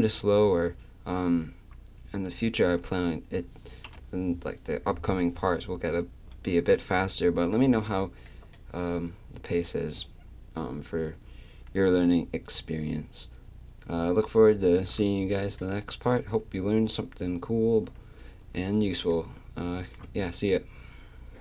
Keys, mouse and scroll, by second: 3.9 KP_3, 15.4 click, 17.0-19.1 drag.